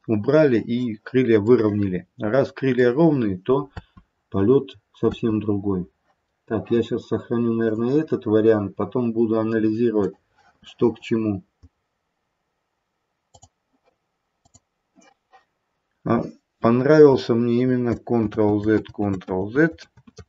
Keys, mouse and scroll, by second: 1.5 middle click, 2.6 middle click, 3.6 space, 5.0 space, 6.2-7.6 scroll down 1, 7.6 click, 18.3 ctrl+z, 18.8 ctrl+z, 19.7 ctrl+z, 19.8 ctrl+z.